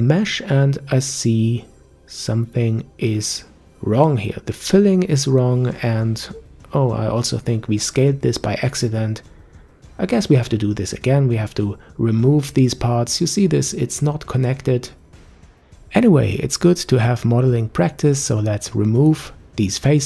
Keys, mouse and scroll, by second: 2.2-2.7 scroll up 3, 2.7 Tab, 3.2 click, 4.2 click, 5.0 Tab, 5.4-6.9 middle drag, 6.9 scroll up 2, 7.1-8.7 middle drag, 8.7 click, 9.3 click, 9.6 middle click, 10.1 shift+click, 10.3 middle click, 10.8 s, 14.5-15.5 middle drag, 17.2 click, 17.7 Delete, 18.4-19.9 middle drag.